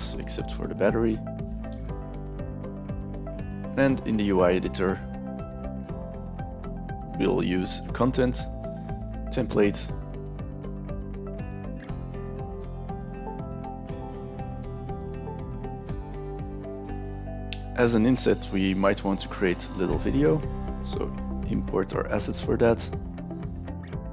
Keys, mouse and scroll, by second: 3.6 click, 6.7 click, 9.2 click, 11.3 click, 11.4 click, 12.4 a, 13.1 click, 13.2 click, 13.5 click, 13.7 click, 14.3 s, 14.5 space, 21.1 click, 23.0 click, 23.9 shift+click, 24.0 click.